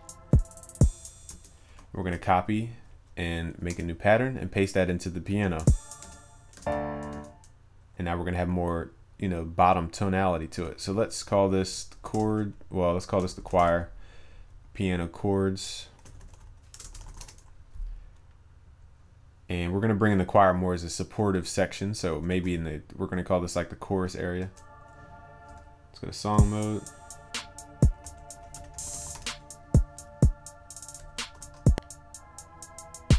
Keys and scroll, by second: 5.4 ctrl+v, 22.3 ctrl+s, 31.5 ctrl+s.